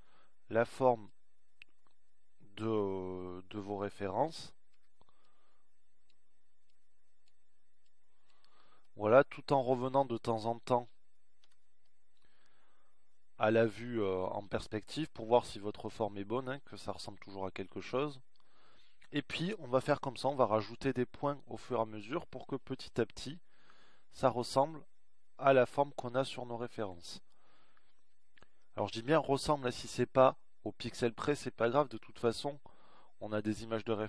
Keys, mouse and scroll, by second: 1.0-2.7 right drag, 6.2 a, 6.7 b, 8.6-10.1 drag, 13.5 z, 20.0 middle click.